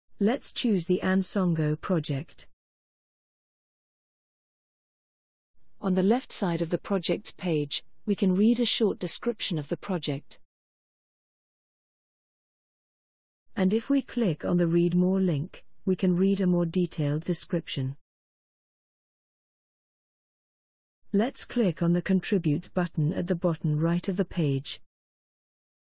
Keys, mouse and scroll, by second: 2.4 click, 15.6 click, 24.9 click.